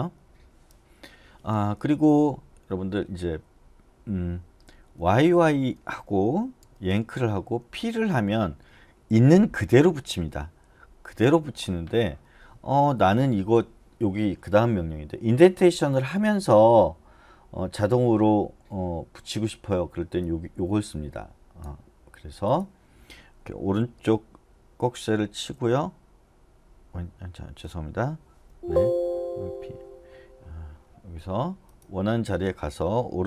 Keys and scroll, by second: 0.2 Escape, 2.7 j, 2.9 j, 5.0-6.9 typing, 11.5 u, 13.0 j, 25.6 }, 28.5 Escape, 29.5 [.